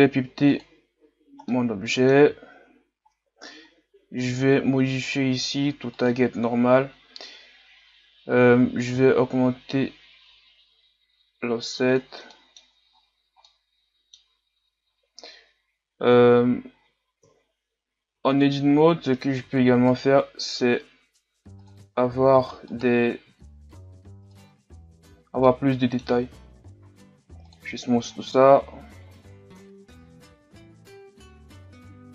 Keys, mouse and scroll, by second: 0.0 click, 1.5-2.5 middle drag, 2.5-2.9 scroll down 4, 6.3-12.3 drag, 12.3 middle click, 12.9-13.5 scroll up 8, 13.5-17.2 middle drag, 17.2 KP_3, 18.2 Tab, 19.4 ctrl+r, 22.3 ctrl+r, 24.7 Tab, 25.0-25.5 scroll down 4, 25.5-27.5 middle drag, 27.5 w, 28.1-28.7 scroll up 5, 28.7-29.6 scroll down 2, 29.6 KP_3, 31.3-31.8 scroll up 5.